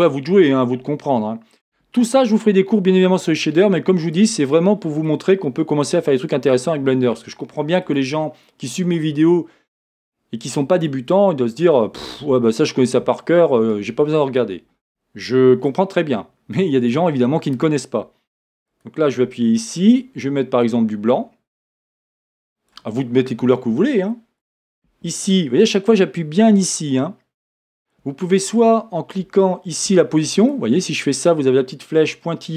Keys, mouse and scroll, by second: 18.9 click, 24.6 click.